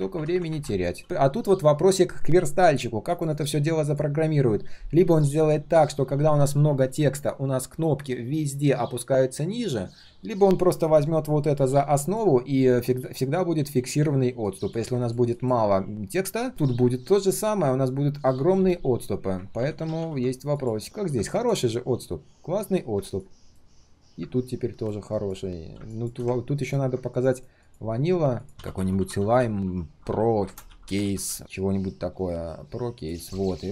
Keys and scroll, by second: 19.6 ctrl+z, 19.8 ctrl+z, 20.0 ctrl+z.